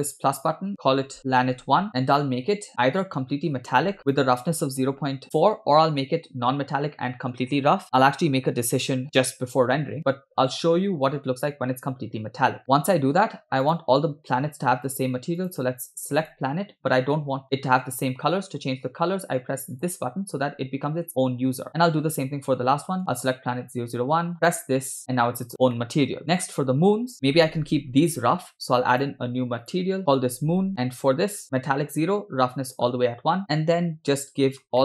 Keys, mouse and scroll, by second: 0.1 click, 0.8-1.9 shift+drag, 1.9 scroll down 2, 3.1 click, 4.1-5.5 drag, 12.6 scroll down 1, 12.8-13.3 shift+middle drag, 13.7 click, 15.4 click, 19.8 click, 21.7 click, 23.1 click, 24.5 click, 25.8 shift+middle click, 26.3 click, 29.0 click, 29.7 click, 30.1 click, 30.7 scroll down 3, 32.1 click, 33.6 scroll down 1, 33.8-34.7 shift+middle drag.